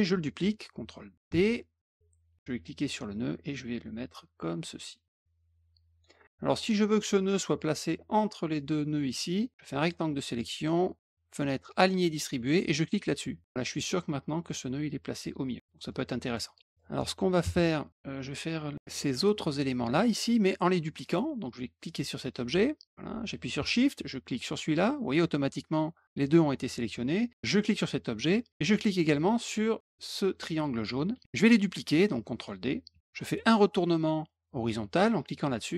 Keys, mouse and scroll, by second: 1.2 ctrl+d, 2.7-5.9 drag, 9.5 click, 11.5 click, 13.3 click, 15.5 click, 15.6 middle click, 16.3 middle click, 16.6 middle click, 21.0 click, 21.8 click, 24.3 shift+click, 27.5 shift+click, 29.3 shift+click.